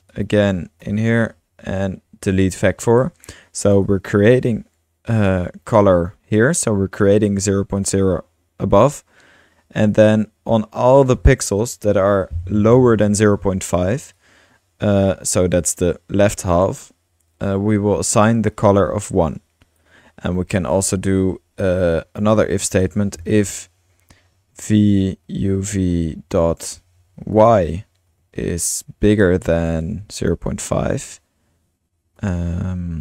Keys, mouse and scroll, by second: 0.1-0.7 ctrl+drag, 0.2-1.2 typing, 3.8-6.0 drag, 5.6 typing, 6.2 click, 7.8-9.8 drag, 9.9 click, 11.0 click, 11.6 BackSpace, 14.2-15.2 drag, 17.3-17.7 drag, 18.6-21.5 drag, 19.8 typing, 21.5 Return, 22.2-23.5 typing, 24.6 typing, 25.6 typing, 27.1-28.1 typing, 29.8-30.6 typing, 32.2 typing.